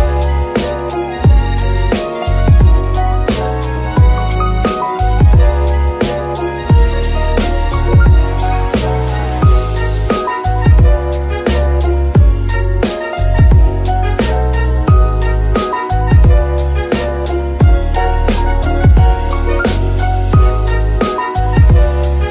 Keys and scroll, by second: 2.1 KP_3, 16.0 g, 18.7 shift+g, 18.8 shift+y, 20.4 g, 20.6 z, 21.8 KP_3.